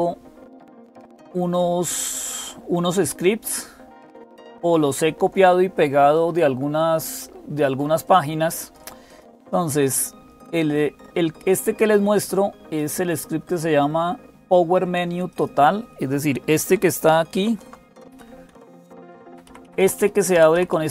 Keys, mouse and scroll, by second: 0.0-20.9 typing, 3.0-6.5 drag, 6.8 click, 7.8-9.0 drag, 11.1-12.6 drag, 15.1 click, 17.2 super+x, 18.3 Down, 18.5 Down, 18.6 Down, 18.8 Down, 19.1 Up, 19.2 Up, 19.4 Up, 19.6 Up, 20.1 Up, 20.3 Down.